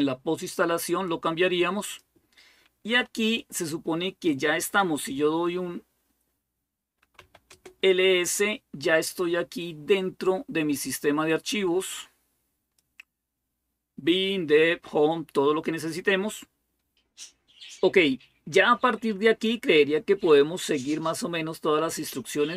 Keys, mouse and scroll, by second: 6.5-7.5 typing, 10.6-12.9 drag.